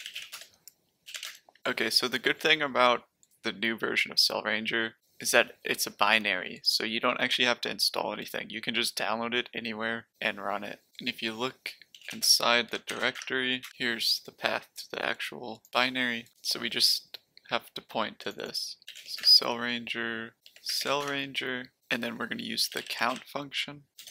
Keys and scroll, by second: 0.0-1.5 typing, 11.7-13.4 typing, 13.6 Return, 18.6-21.3 typing, 22.3-23.9 typing.